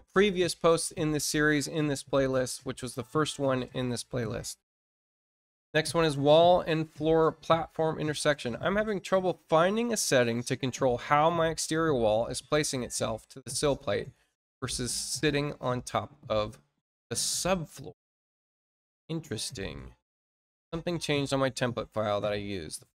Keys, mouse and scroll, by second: 5.6 click, 7.7-8.1 scroll down 2.